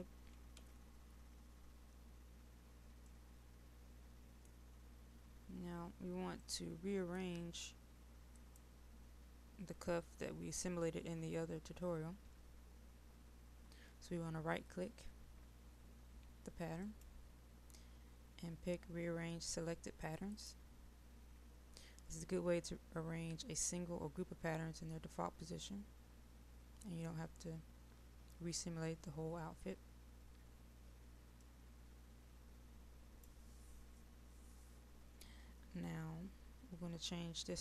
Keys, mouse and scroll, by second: 0.6 Delete, 3.1-8.0 middle drag, 8.3 click, 21.5 click, 25.7-26.4 scroll up 1, 26.4-31.5 scroll down 1, 31.5-34.1 right drag.